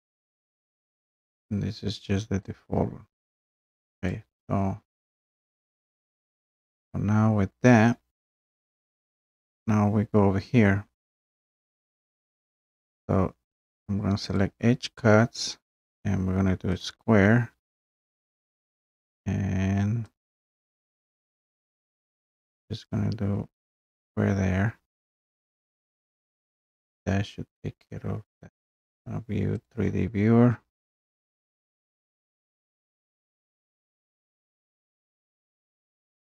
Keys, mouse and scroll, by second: 0.0 scroll, 3.3 click, 4.2 click, 14.4 click, 16.8 click, 17.4 scroll, 17.8-18.4 scroll down 4, 18.4-20.2 scroll up 1, 20.2 click, 20.5 scroll, 23.7 click, 28.8 click, 29.7 click, 31.6-32.0 scroll, 32.5-33.0 scroll.